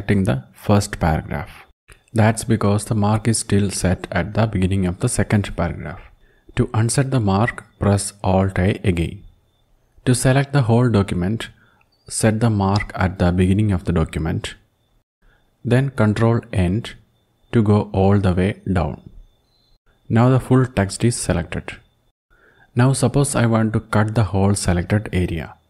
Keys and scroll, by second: 6.6 alt+a, 14.5 alt+a, 18.0 ctrl+End.